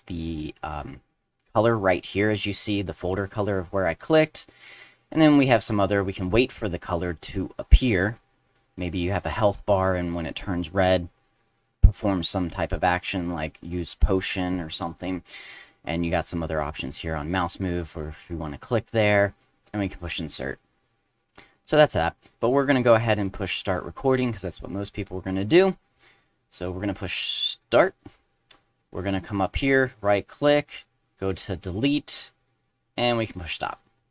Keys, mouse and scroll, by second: 21.6 click, 27.6 click, 29.4 right click, 31.8 click, 33.2 click.